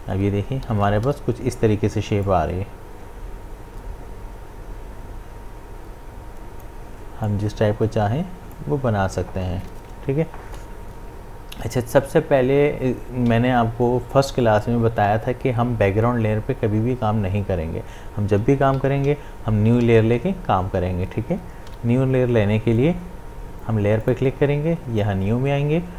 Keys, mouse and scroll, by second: 0.0-1.1 typing, 2.3-11.0 drag, 18.8 ctrl+z, 23.7 v, 24.0 click.